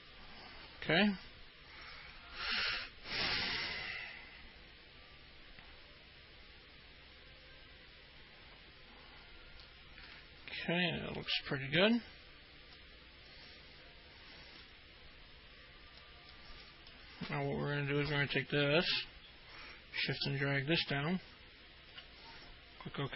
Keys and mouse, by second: 0.0-10.3 alt+middle drag, 13.0-14.9 alt+middle drag, 16.7 alt+middle click, 20.6-22.2 shift+drag.